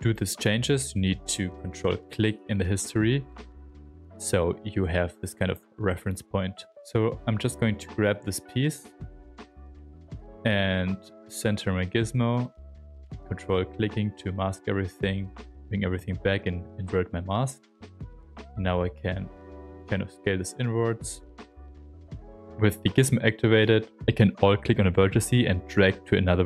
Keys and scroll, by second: 7.5 ctrl+shift+a, 9.3 shift+f, 9.9 w, 17.9 shift+f, 18.3 s, 20.6 s, 21.5 w.